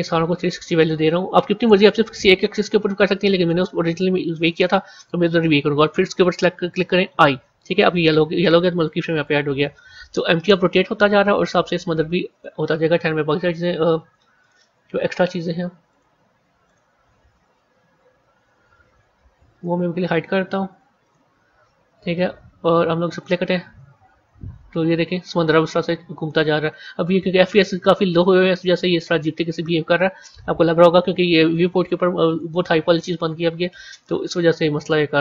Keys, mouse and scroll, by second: 1.7-4.8 drag, 8.9-11.8 drag, 13.1 scroll up 2, 14.3 click, 14.6-15.8 scroll up 7, 15.8 click, 17.4 scroll down 1, 19.4 click, 20.9 click, 21.4 scroll down 1, 23.1-26.3 drag, 32.4-35.2 drag.